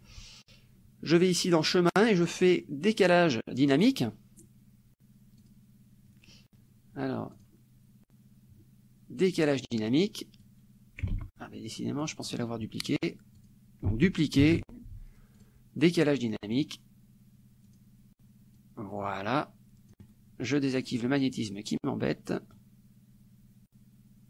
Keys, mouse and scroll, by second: 3.9 click, 5.4 click, 7.4 click, 9.4 click, 10.5 click, 11.2 ctrl+z, 12.1 click, 13.4 click, 14.5 ctrl+d, 15.4 click, 16.5 click, 17.7 click, 18.6-20.3 drag, 20.8 click, 22.6-24.2 drag.